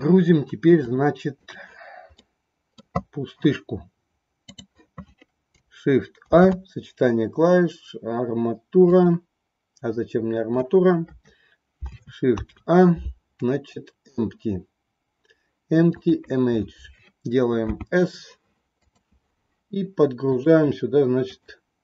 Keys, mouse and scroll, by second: 0.8 click, 2.1 middle click, 6.1 shift+a, 11.0 Delete, 12.4 shift+a, 17.6 s, 20.3 click, 21.6 click.